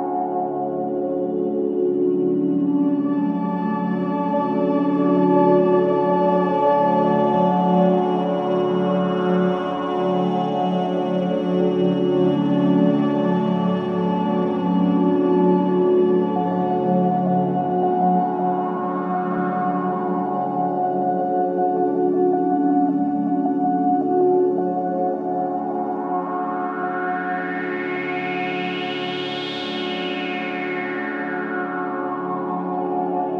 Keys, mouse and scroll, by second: 1.1 click, 1.5 scroll down 1, 1.8 alt+click, 2.8 w, 3.3 right click, 4.0 click, 4.2 alt+click, 4.5 alt+middle click, 4.8 click, 5.3-6.8 right drag, 6.8 click, 8.7 alt+middle click, 10.6 click, 15.4 click, 17.8 click, 19.2 ctrl+z, 19.5 click, 19.9 ctrl+z, 20.7-25.3 drag, 25.3 Delete, 26.1 click, 27.3 alt+click, 27.7 alt+right click, 28.0 alt+click, 28.4 alt+middle click, 28.9 alt+right click, 29.3 alt+click, 29.7 alt+right click, 30.0 alt+middle click, 31.0-32.2 typing, 31.6-31.9 scroll down 1, 32.8-33.3 scroll up 1.